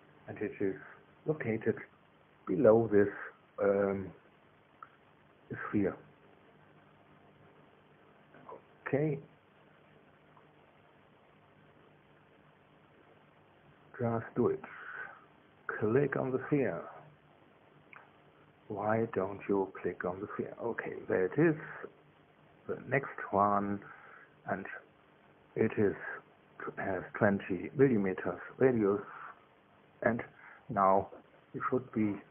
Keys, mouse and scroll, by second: 20.8 click, 23.5 click, 26.4 click, 27.4 KP_2, 27.7 KP_0, 28.4 KP_Enter.